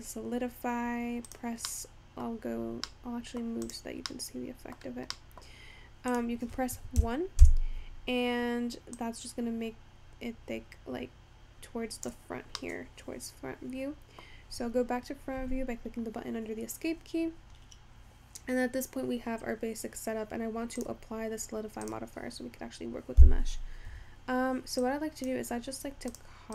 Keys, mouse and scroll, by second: 2.3-5.2 drag, 5.2 middle click, 5.8-6.5 scroll down 1, 6.5-12.4 drag, 19.8-20.8 scroll down 3, 20.8-24.6 drag, 25.3 click.